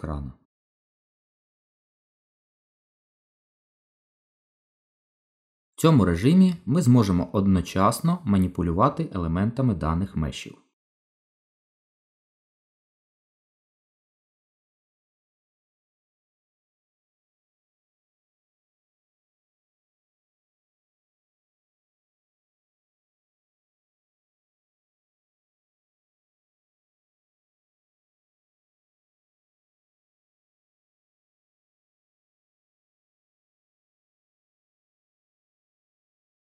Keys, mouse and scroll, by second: 0.4 click, 6.1 click, 8.2 shift+click, 9.7 shift+click, 11.1 g, 14.8 middle click, 18.5 ctrl+z, 20.0 click, 20.6 click, 21.3 shift+click, 21.9 shift+click, 22.1 click, 22.9 g, 24.9 middle click, 26.7 ctrl+z, 27.7 click, 28.2 click, 29.1 shift+click, 29.2 shift+click, 29.7 click, 29.9 middle click, 31.0 g, 32.3 middle click, 35.5 ctrl+z.